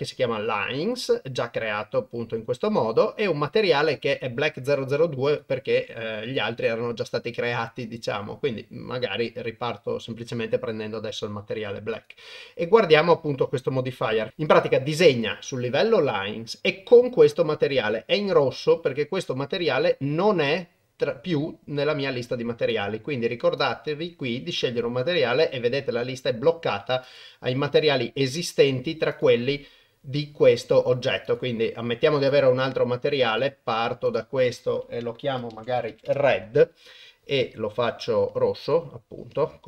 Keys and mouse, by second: 2.6-3.6 drag, 5.3 click, 22.7 click, 23.6-27.2 drag, 31.2 click, 32.3-33.6 drag, 34.2-36.1 drag.